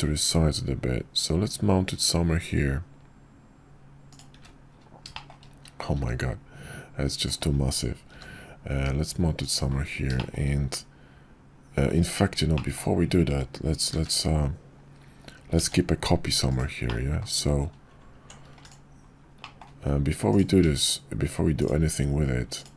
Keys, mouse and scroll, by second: 5.2 shift+click, 5.9 s, 8.1 g, 10.2 shift+click, 12.6 click, 15.6 shift+d, 16.9-17.3 drag, 18.5 x, 19.4 click.